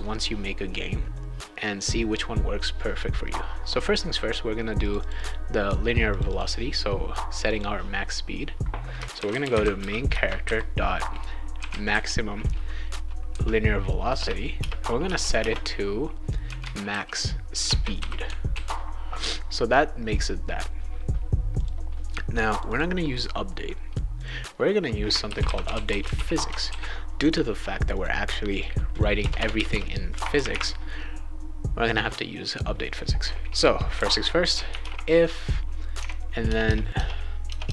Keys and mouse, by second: 4.8 click, 5.0 click, 5.1 click, 6.1 click, 6.3 click, 7.5 click, 8.9-12.4 typing, 14.1 Return, 14.6 space, 15.0 =, 16.2-18.0 typing, 17.6 Return, 18.5 ctrl+s, 21.5 click, 22.5 click, 22.7 click, 24.2 click, 25.0-26.6 typing, 26.6 ctrl+s, 27.9 click, 28.5 click, 28.9 click, 29.2 Return, 29.4 Return, 29.5 Return, 29.7 Return, 33.7-35.3 typing, 36.0 Tab, 36.4-37.7 typing.